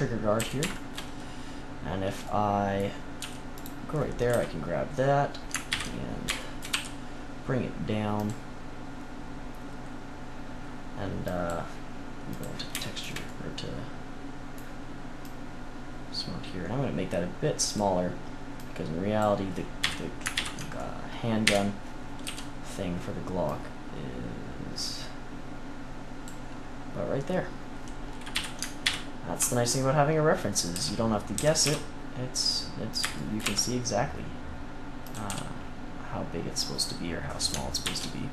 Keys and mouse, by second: 0.3 a, 3.1 z, 3.5 click, 4.2 KP_3, 5.6 ctrl+KP_1, 6.6 e, 11.2-13.9 drag, 15.1-17.7 drag, 18.5-19.7 drag, 19.7 KP_3, 20.3 ctrl+KP_3, 21.4 KP_1, 22.2 z, 23.4-24.7 drag, 28.3 KP_3, 28.8 ctrl+KP_3, 30.7 z, 31.3 s, 33.1 click, 33.4 e, 35.2 z, 37.8 ctrl+r.